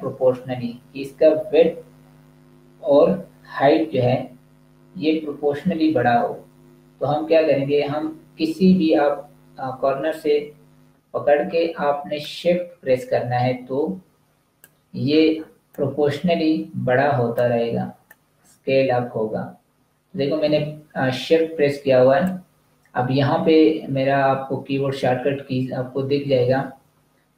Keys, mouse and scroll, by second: 12.1 shift+click, 17.9 shift+click.